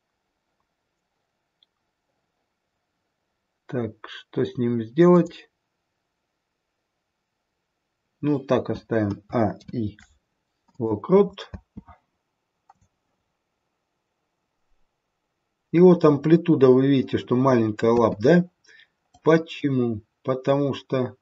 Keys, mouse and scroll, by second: 9.0 a, 9.4 i, 11.5 space, 12.7 click, 17.8 space, 19.1 click.